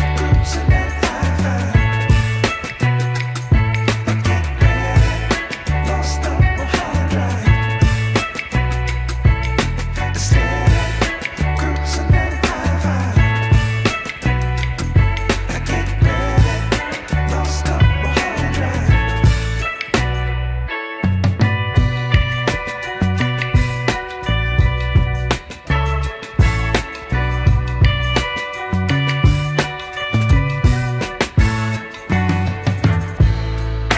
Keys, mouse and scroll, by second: 0.6 KP_1, 1.4 g, 5.2 shift+middle click, 5.6 click, 6.0 click, 6.7 r, 11.0 ctrl+z, 12.1-13.5 drag, 14.7 r, 18.3 ctrl+z, 18.8 r, 21.1 ctrl+z, 21.9-22.3 scroll down 3, 22.3 middle click, 26.6 Tab, 28.6 Tab, 30.4 middle click, 30.9 r, 33.5 click.